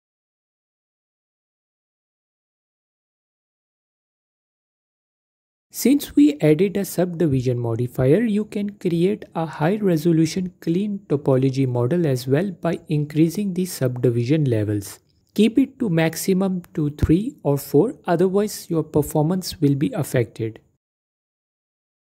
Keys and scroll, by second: 2.3 F4, 10.6 F4, 10.8 F4.